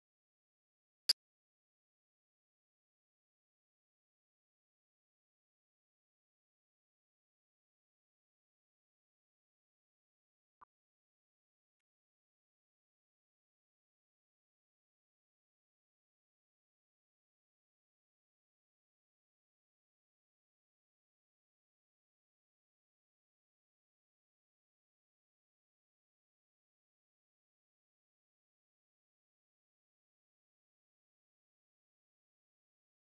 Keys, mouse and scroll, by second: 0.0-0.5 ctrl+z, 0.7-1.3 ctrl+z, 1.5-2.3 scroll down 6, 2.0 middle click, 2.3 shift+middle click, 2.4 scroll up 1, 2.6 2, 2.6 click, 2.8 a, 2.9 x, 3.5 Tab, 3.7 scroll down 3, 3.8 shift+middle click, 3.9 Tab, 4.0 scroll up 8, 4.3 click, 4.5 shift+middle click, 4.9-5.3 scroll down 8, 5.0 middle click, 5.3 shift+middle click, 5.8 scroll up 12, 6.0 middle click, 6.2-6.8 scroll down 2, 6.3 shift+middle click, 6.4-6.8 typing, 6.5 click, 6.8 click, 7.0 middle click, 7.3-7.8 scroll down 3, 7.8 middle click, 8.2 shift+g, 9.0 middle click, 9.5-10.6 drag, 10.6 middle click, 11.0 shift+g, 12.4 click, 12.6 shift+g, 13.0 middle click, 13.6 scroll down 9, 13.7 middle click, 14.1 b, 14.4 middle click, 14.5 scroll up 9, 14.7 scroll down 9, 15.1 g, 15.5 middle click, 16.0 g, 16.3 scroll down 1, 16.4 s, 17.0 scroll up 2, 17.1 s, 17.4 Tab, 17.5-18.0 shift+middle drag, 18.0 scroll up 1, 18.3 3, 18.3 click, 18.7 middle click, 19.2 u, 19.9-20.2 scroll up 6, 20.2 middle click, 20.3 u, 21.1-21.8 scroll down 9, 21.8 middle click, 22.0 scroll up 7, 22.2 middle click, 22.4 click, 22.6 middle click, 23.0 ctrl+z, 23.1 scroll down 8, 23.3 middle click, 23.6 z, 23.8 middle click, 24.0 b, 24.3 middle click, 24.6 u, 25.0 scroll up 5, 25.2 scroll down 1, 25.3 middle click, 25.5 scroll up 6, 25.6 z, 25.8-26.1 shift+middle drag, 26.1 a, 26.3 r, 26.8 Tab, 27.0 shift+middle click, 27.7 click, 27.8 Tab, 27.9 click, 28.4 shift+g, 29.4 middle click, 29.4 scroll down 8, 29.6 middle click, 30.0-33.1 typing, 31.8 middle click, 32.1 scroll up 5.